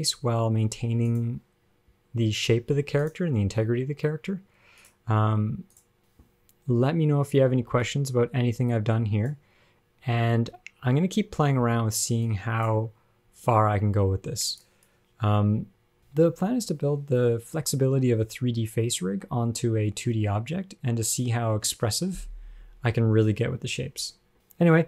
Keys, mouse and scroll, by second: 0.3 f, 2.0 click, 3.8 click, 5.0 click, 6.9 space, 7.8 space, 8.2 click, 10.3 space, 11.9 space, 12.6 click.